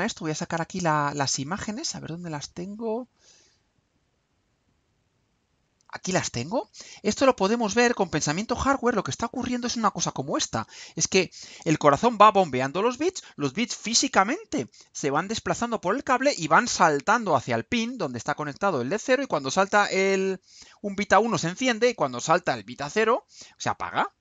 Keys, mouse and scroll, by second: 4.1 click, 5.7 click, 7.3 click, 8.3-9.8 drag.